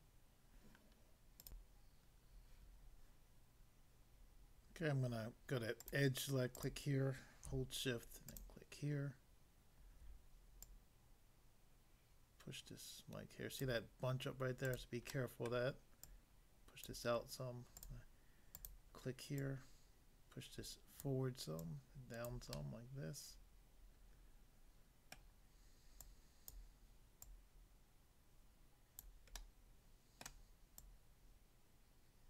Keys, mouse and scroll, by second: 1.4 click, 1.7 click, 5.9 click, 6.6 click, 8.3 shift+click, 10.7 click, 13.6 click, 14.7 click, 14.8 click, 15.2 middle click, 15.6 middle click, 16.1 click, 16.8 click, 17.8 click, 18.6 click, 18.7 click, 19.4 click, 21.0 click, 21.7 click, 22.3 click, 22.5 middle click, 25.2 middle click, 26.1 click, 26.5 click, 27.3 click, 29.0 click, 29.4 middle click, 30.2 middle click, 30.8 click.